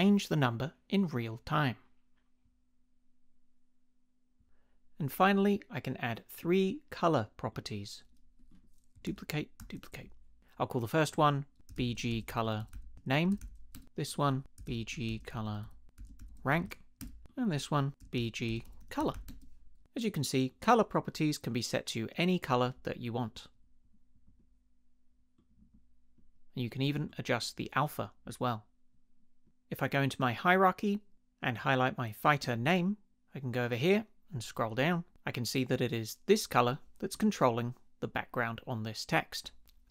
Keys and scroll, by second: 9.1 super+d, 11.5-19.7 typing.